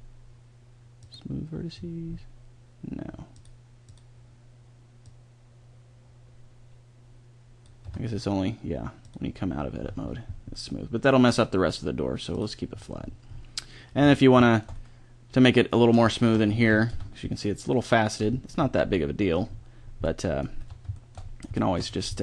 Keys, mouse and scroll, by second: 0.4 click, 1.0 click, 2.0 click, 2.2-7.0 middle drag, 7.8 Tab, 9.0-10.7 drag, 12.3-13.8 drag, 13.8 middle click, 14.0 Tab, 16.9 Tab, 20.6 Tab, 22.0 scroll up 1.